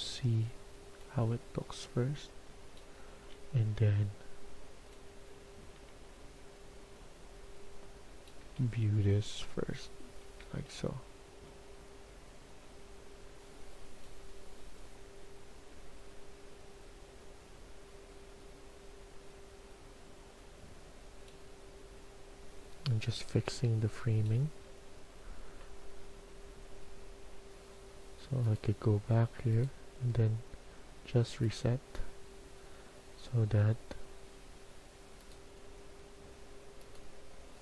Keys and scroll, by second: 3.0 s, 8.4 a, 10.4 a, 24.4 a.